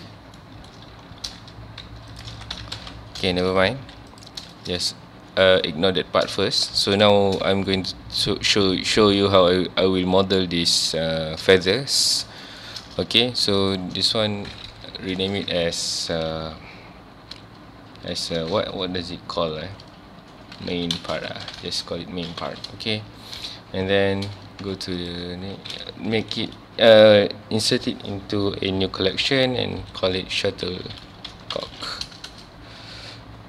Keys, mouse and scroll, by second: 0.4-0.7 shift+middle drag, 0.7 scroll up 1, 1.2 g, 2.2 shift+click, 2.3 alt+a, 2.5 Tab, 2.7 alt+a, 2.8 alt+scroll down 1, 3.3 shift+middle drag, 3.5 scroll up 1, 3.8 ctrl+s, 4.1 click, 4.5-6.9 shift+middle drag, 6.9 ctrl+s, 7.5-10.6 shift+middle drag, 11.3 scroll down 1, 11.6-12.0 shift+middle drag, 12.0 scroll up 1, 12.4-12.7 shift+middle drag, 12.7-13.1 scroll up 1, 13.1 ctrl+s, 13.6 click, 14.9 F2, 21.8 Return, 24.2 m, 32.3 Return.